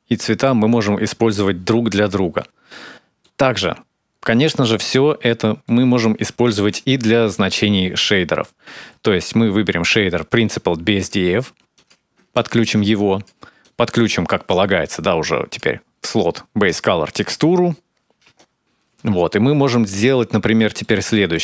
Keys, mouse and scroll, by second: 2.5 middle click, 3.6-4.2 scroll up 3, 4.2-5.4 scroll up 2, 5.4 middle click, 6.3 shift+a, 12.1 ctrl+shift+click, 12.8 click, 13.4 click, 14.6 click, 18.6 click, 18.6 space, 18.7 space, 18.9 middle click, 19.9 middle click, 20.5 scroll down 2, 20.7 middle click, 21.1-21.4 scroll down 4.